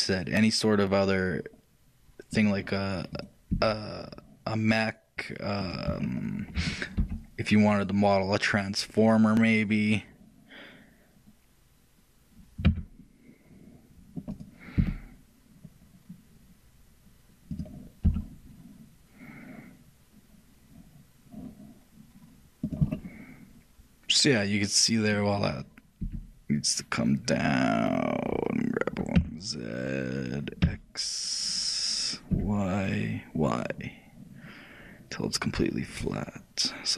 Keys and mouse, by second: 6.2-8.1 middle drag, 7.2 e, 23.0-36.9 middle drag.